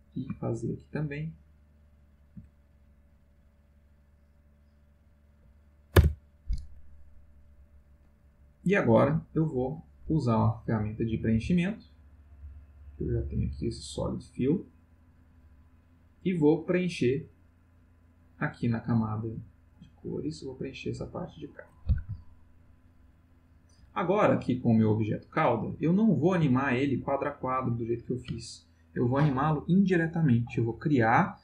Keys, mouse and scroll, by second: 0.0-2.3 shift+drag, 2.9 click, 4.5 click, 5.9 Return, 10.5 click, 11.9 click, 13.2 click, 18.0 click, 19.1 click, 19.8 click, 20.8 click, 23.3 ctrl+middle click, 25.8 ctrl+middle click, 27.0 shift+middle click.